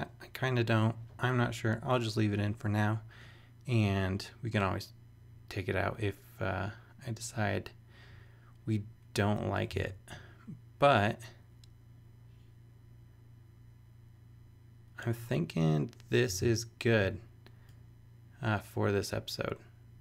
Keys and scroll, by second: 9.8 super+Tab, 16.4 super+Tab.